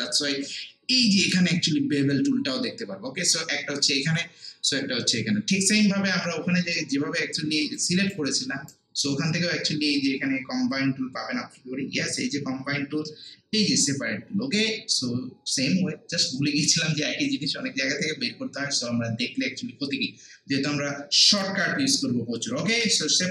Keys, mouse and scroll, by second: 7.7 click, 8.7-19.4 shift+right drag.